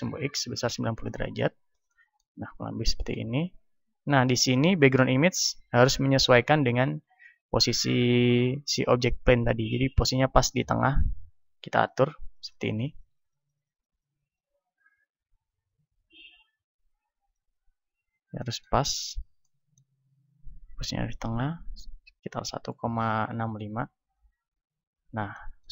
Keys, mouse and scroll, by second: 1.3-2.9 drag, 5.8 click, 11.9-16.2 drag, 17.4-18.8 drag, 18.4-21.8 middle drag, 21.8-23.4 drag, 24.6-25.7 middle drag.